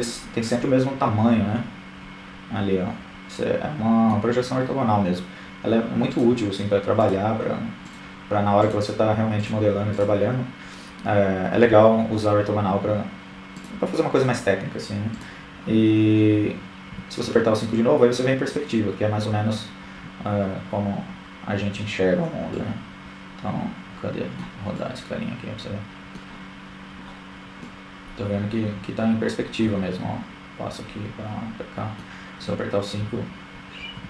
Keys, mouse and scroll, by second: 2.7-8.0 right drag, 13.4 KP_5, 20.2 middle click, 22.5-25.5 middle drag, 28.9-31.4 typing, 30.0-33.2 middle drag.